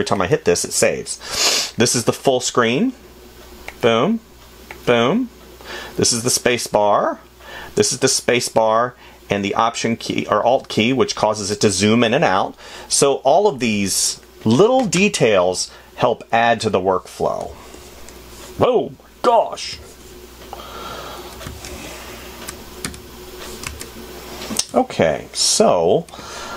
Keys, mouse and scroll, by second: 5.4 f, 25.2 space.